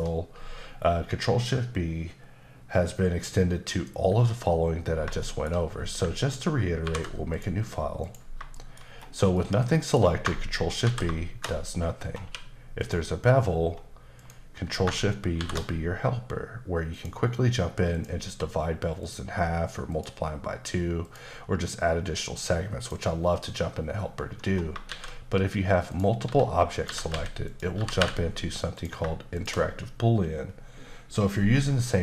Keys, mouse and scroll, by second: 4.9 scroll down 1, 5.2 shift+middle click, 5.7 scroll down 1, 6.8 ctrl+n, 7.3 click, 8.0 click, 8.5 shift+middle click, 8.8-9.3 scroll up 1, 9.3 middle click, 10.8 ctrl+shift+b, 11.8-12.2 scroll up 2, 12.2 q, 12.8 click, 13.5-14.2 scroll up 2, 14.2 click, 15.4 ctrl+shift+b, 16.9 click, 17.9 click, 19.9 click, 21.0 click, 22.8 click, 24.4 scroll down 1, 24.9 shift+a, 25.9 click, 26.2-28.0 typing, 26.7 click, 27.5 click, 28.7 click, 29.3 shift+click, 29.5 click.